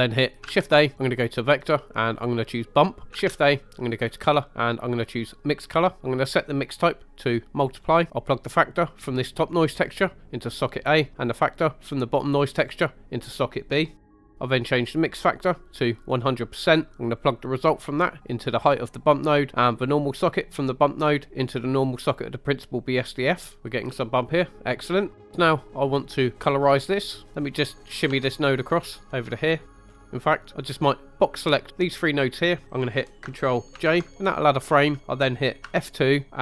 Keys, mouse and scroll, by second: 0.5 shift+a, 3.2 shift+a, 6.0 click, 6.6-7.7 drag, 8.1 right click, 8.7 click, 9.0-10.5 drag, 11.2 click, 11.6-13.3 drag, 14.8-16.2 drag, 17.2-18.7 drag, 19.8-21.8 drag, 23.6 scroll up 2, 23.9 scroll down 3, 24.8 scroll up 1, 25.1 middle click, 27.3 right click, 28.1 g, 29.7 click, 29.9 scroll down 3, 30.0 middle click, 30.7-31.8 drag, 33.8 ctrl+j, 35.6 F2.